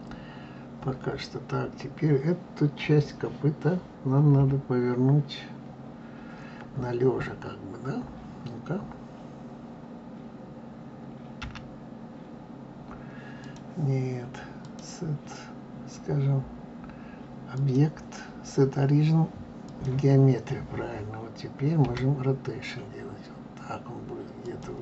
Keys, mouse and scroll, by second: 4.3 KP_3, 11.4 g, 14.6-17.6 drag, 21.8 r.